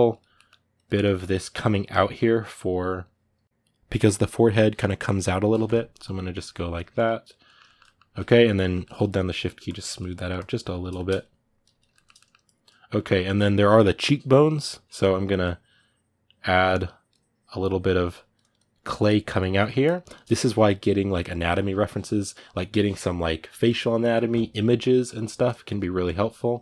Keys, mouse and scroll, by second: 0.1 middle click, 0.5 click, 0.8 middle click, 1.6-7.2 drag, 7.2-9.1 middle drag, 9.1-10.7 shift+drag, 10.7 middle click, 11.0 shift+click, 11.7-15.2 shift+middle drag, 15.2-19.1 drag, 19.1 ctrl+middle click, 19.6-25.4 drag, 25.4 middle click, 25.8 click.